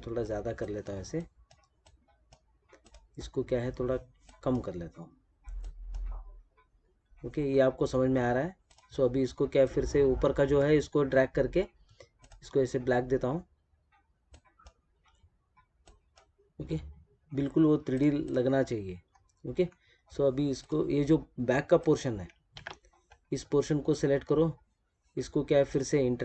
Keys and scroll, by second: 22.4 ctrl+z.